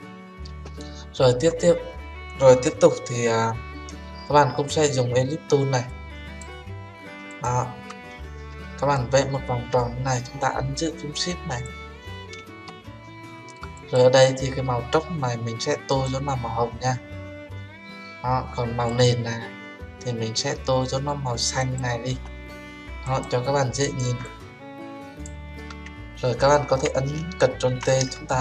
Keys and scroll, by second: 27.8 ctrl+t.